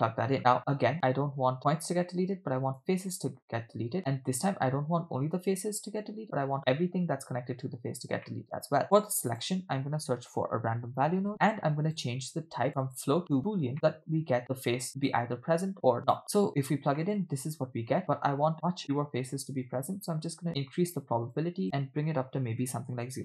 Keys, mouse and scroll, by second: 0.4 scroll up 3, 0.6 scroll down 2, 1.6-2.9 drag, 3.9 scroll up 3, 6.2 scroll down 1, 8.3 middle click, 8.8 shift+a, 12.8-13.5 drag, 13.7 middle click, 14.9 click, 15.7-16.2 drag, 17.0 middle click, 17.9-19.2 scroll up 5, 19.6-21.4 drag, 21.6-23.0 drag.